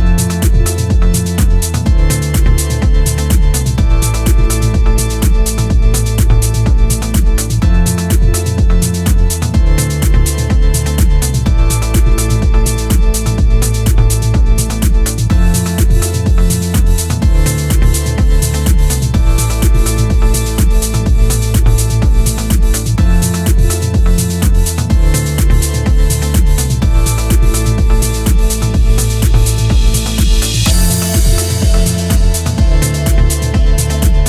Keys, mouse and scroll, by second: 0.0 click, 0.5 click, 1.1 click, 1.5 click, 2.0 click, 6.3 scroll down 3, 6.5 middle click, 7.5 scroll up 3, 7.7 scroll down 1, 8.0 middle click, 9.5-10.1 scroll up 1, 10.1 click, 10.7 click, 11.6 click, 12.5 click, 14.0 click, 15.1 click, 17.2 scroll up 5, 17.9 click, 18.9-19.4 scroll down 3, 19.4 shift+middle click, 20.0 middle click, 20.6 click, 21.0 click, 21.4 click, 21.7 click, 22.1 click, 22.4 click, 22.7 click, 23.1 click, 23.8 click, 24.2 click, 24.4 click, 24.7 click, 24.9 click, 25.1 click, 25.4 click, 25.7 scroll down 3, 25.9 middle click, 27.2-27.7 scroll up 5, 28.2 click, 28.9 click, 29.6 click, 30.3 scroll down 4, 31.1-31.7 scroll up 3, 31.6 shift+middle click, 32.4 scroll up 2, 32.6 shift+middle click, 33.4 click.